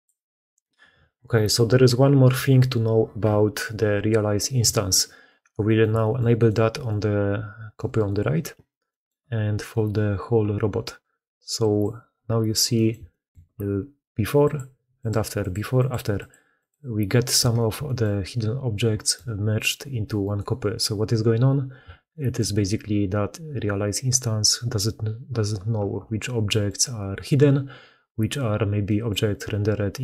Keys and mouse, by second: 5.1 alt+a, 5.5 click, 5.8 shift+click, 6.2-6.7 drag, 7.6 g, 8.7 click, 11.4 click, 12.7 shift+middle click, 14.3 middle click, 14.9 middle click, 17.2 shift+middle click, 17.5 shift+middle click, 17.8 middle drag, 18.8 shift+middle click, 19.4 middle click, 19.7 g, 21.9-22.3 shift+middle drag, 28.7 middle click.